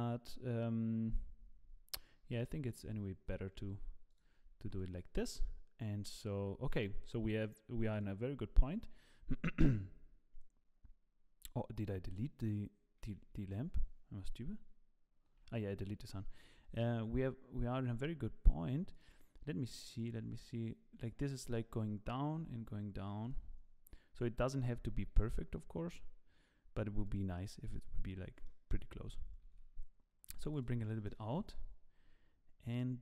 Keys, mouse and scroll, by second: 2.7 click, 3.5 Delete, 4.1 click, 4.8 click, 6.4-7.2 scroll down 2, 7.8 click, 7.9 click, 16.5 g, 25.1 g, 27.4 middle click, 28.0 scroll down 7, 28.4 middle click, 29.5 g, 31.1 KP_0.